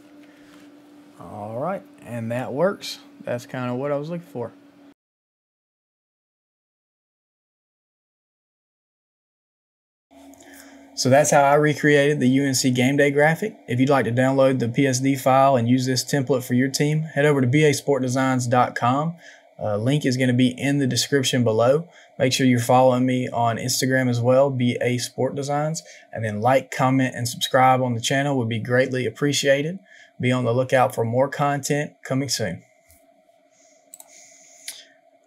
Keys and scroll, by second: 0.3 Return.